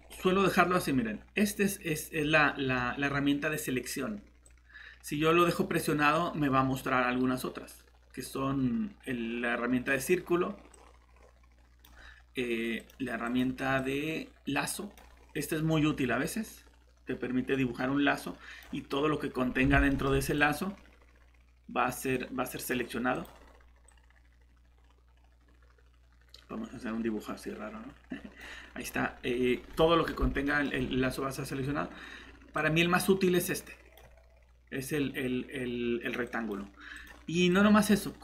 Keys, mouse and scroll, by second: 4.4 click, 19.6 scroll down 1, 19.9 scroll up 1, 19.9 middle click, 20.4 click, 28.8-29.5 scroll up 1, 30.4 shift+middle click, 30.7 scroll up 1, 32.6 click.